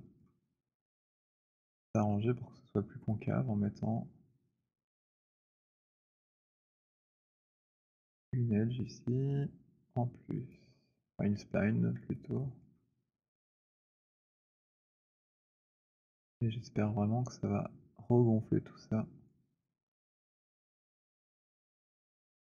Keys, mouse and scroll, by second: 0.1 alt+click, 0.5 alt+click, 0.8 alt+middle click, 5.1 click, 7.0 click, 10.4 click, 12.7 alt+click, 13.2 alt+middle click, 13.4 alt+click, 14.8 click, 19.2 click, 20.7 click, 21.3 click.